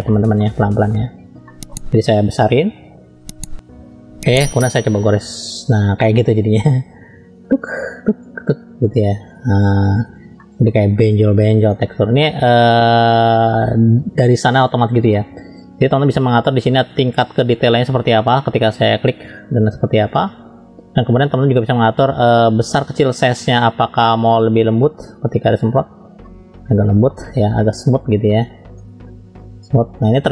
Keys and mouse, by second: 0.1 shift+middle click, 1.5 shift+middle click, 2.5-4.4 typing, 5.3 click, 9.3 click, 10.4 middle click, 12.1 click, 12.9-15.8 middle drag, 17.0-18.1 drag, 22.5-24.7 drag, 26.2-27.4 middle drag, 28.4 click, 29.6 click.